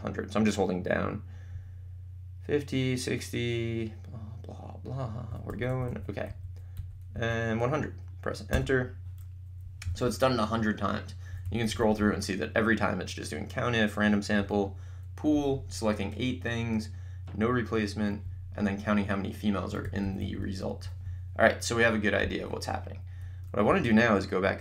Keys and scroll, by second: 8.6 Return, 9.7 Up, 10.0 Down, 23.7 Up.